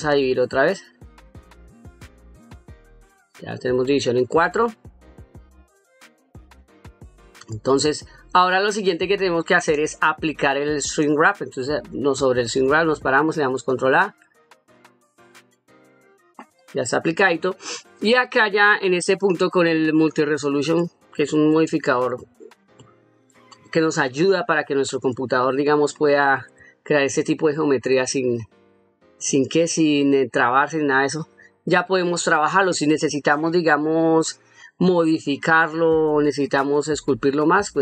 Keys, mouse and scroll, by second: 3.4-8.0 middle drag, 16.8-17.2 middle drag, 18.3-18.8 middle drag, 21.2 middle click, 21.9-22.4 shift+middle drag, 22.7-23.1 middle drag, 24.4-24.9 middle drag, 26.4 shift+middle drag, 27.5-28.0 middle drag, 28.7 middle click, 29.4-29.7 middle drag, 30.3-30.9 middle drag, 31.5-32.1 middle drag, 35.1-35.7 middle drag.